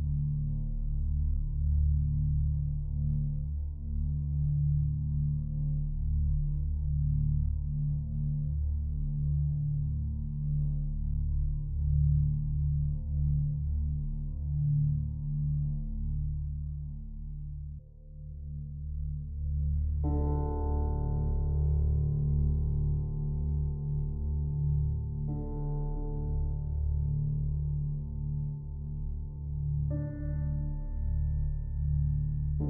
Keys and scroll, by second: 11.7 [.